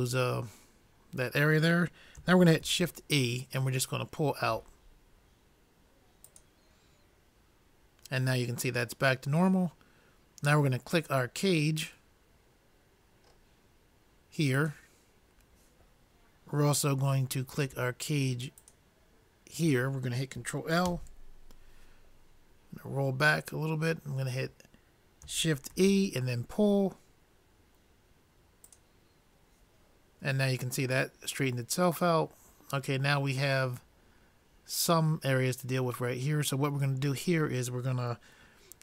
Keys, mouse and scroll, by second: 11.3-12.9 drag, 12.9 middle click, 14.9-16.6 drag, 17.2-18.7 middle drag, 19.2-20.6 drag, 21.2 ctrl+l, 23.2-25.1 middle drag, 25.8 shift+e.